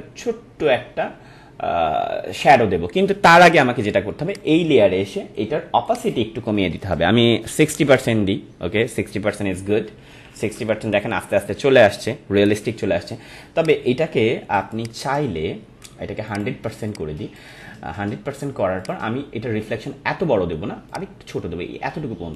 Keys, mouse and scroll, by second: 4.3 click, 9.8 click, 10.0 ctrl+-, 10.6 ctrl+-, 13.6 click, 13.8 ctrl+=, 14.6 space, 14.7 click, 16.3-22.3 drag.